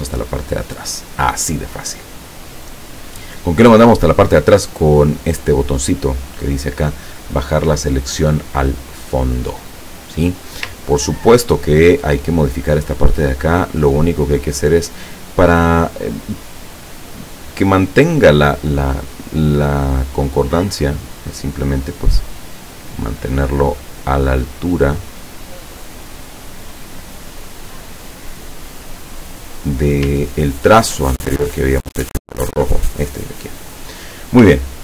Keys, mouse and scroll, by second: 11.1 ctrl+scroll up 2, 12.9 click, 14.1-21.7 drag, 22.7-29.2 drag, 29.4-29.8 scroll down 1, 30.3-30.9 ctrl+scroll down 3, 34.6-34.8 ctrl+scroll down 4.